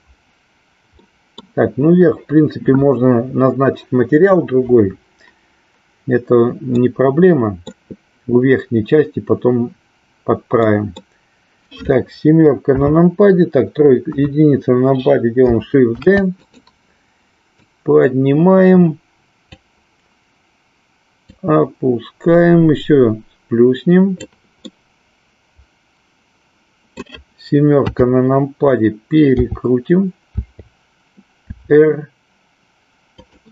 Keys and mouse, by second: 0.9 middle click, 6.8 middle click, 10.6 middle click, 12.6 KP_7, 14.0 KP_1, 15.9 shift+d, 16.5 click, 17.6-19.5 drag, 21.3-24.3 drag, 24.6-27.1 middle drag, 27.9 KP_7, 29.3 t, 30.3 t, 31.5 r.